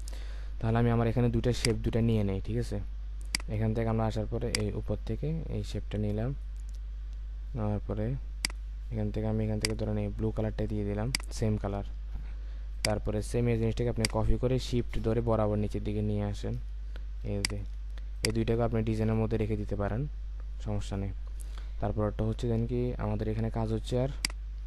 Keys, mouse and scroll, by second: 0.7-1.1 alt+scroll up 1, 1.5 space, 11.7-12.1 alt+scroll down 1, 13.9 alt+click, 17.5 shift+click, 22.8-23.4 alt+scroll down 1, 24.0 space.